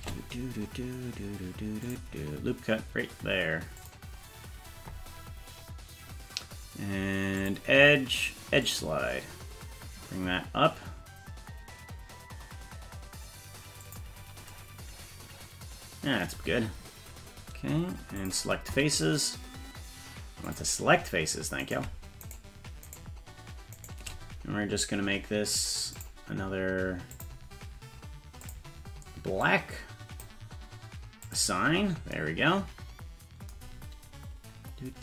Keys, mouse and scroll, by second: 1.9 click, 3.8 click, 7.4-13.9 drag, 18.2 click, 20.5 click, 21.7 right click, 22.3 shift+right click, 22.9 shift+right click, 23.8 shift+right click, 26.0 click, 27.1 click, 28.5 click, 31.2 click.